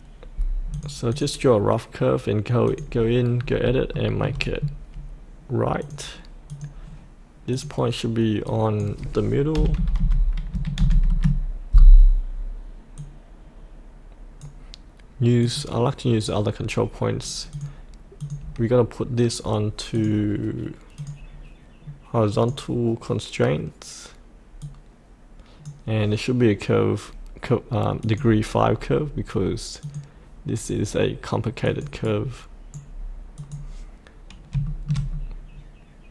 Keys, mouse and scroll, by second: 3.3-3.6 scroll up 1, 3.9 shift+middle click, 4.6-5.8 scroll down 1, 5.8 click, 9.5 KP_8, 10.7 KP_5, 12.9-26.3 drag, 32.0 right click, 33.3-34.4 drag, 34.6 shift+middle click, 35.0-36.1 scroll down 1.